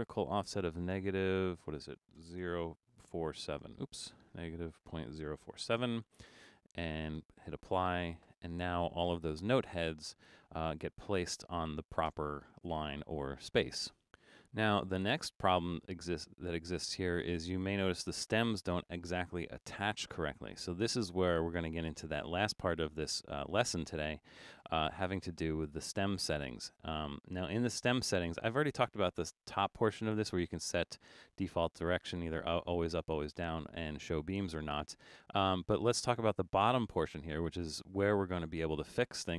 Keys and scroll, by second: 2.5-3.8 typing, 4.1 Left, 4.3 Left, 5.3 BackSpace, 14.8 super+=.